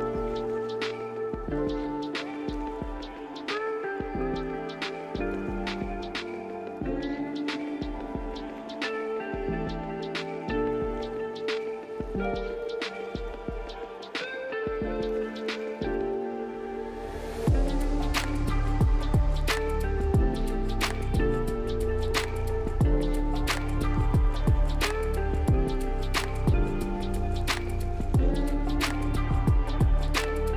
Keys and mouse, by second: 0.2 click, 0.8 click, 1.4 click, 2.2 click, 2.8 click, 3.6 click, 4.7 click, 5.2 click, 5.8 click, 6.2 click, 7.0-7.4 drag, 9.5-9.9 drag, 10.1 click, 13.1 drag, 13.6 click, 15.0 click, 17.0 click, 17.7 drag, 20.3 click, 24.0 click, 27.0 click, 27.2-27.6 alt+drag, 28.2 shift+drag, 28.4 shift+click, 28.7 shift+a, 29.6 click, 30.4 KP_Decimal.